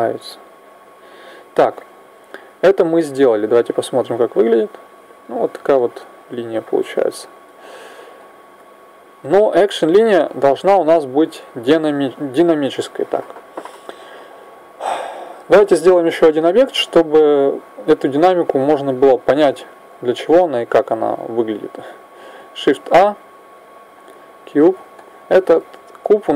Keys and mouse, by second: 1.7-4.2 middle drag, 3.2 click, 5.0 click, 5.7-8.1 middle drag, 8.1-10.0 drag, 10.4-11.8 middle drag, 11.8 KP_1, 22.5 shift+a.